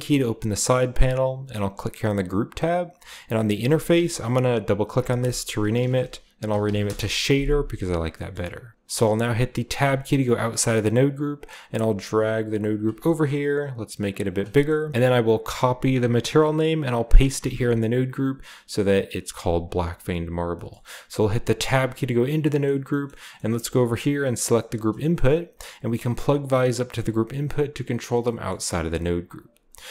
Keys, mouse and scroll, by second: 1.7-4.8 drag, 4.9-7.3 typing, 9.4-10.1 typing, 11.3-12.1 typing, 12.7-14.0 drag, 12.9-14.0 scroll up 1, 14.0 middle click, 14.0-14.9 scroll up 1, 14.3 click, 14.5 middle click, 14.9 ctrl+z, 14.9 space, 14.9 a, 15.5 middle click, 15.6 click, 16.1 ctrl+c, 16.5-17.2 drag, 17.3 ctrl+click, 17.4 ctrl+v, 17.6 drag, 18.1-19.2 drag, 19.5 click, 19.8-21.0 drag, 20.4-21.0 scroll down 1, 20.5 middle click, 21.0 Tab, 22.1-22.5 scroll down 1, 22.4 middle drag, 23.3-24.4 scroll up 1, 23.6 a, 24.4-27.1 drag, 25.1-27.1 scroll up 1, 28.2-29.9 middle drag.